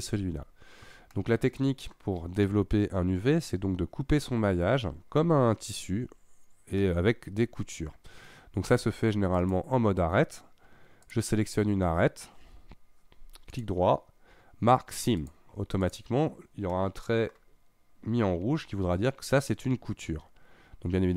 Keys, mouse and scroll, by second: 1.1 middle click, 6.8-9.4 middle drag, 9.4 click, 11.1 click, 13.5-15.8 right drag, 15.8 click, 16.4-16.8 scroll up 1, 16.8 middle click, 17.6 scroll up 1, 20.8-21.1 scroll down 1.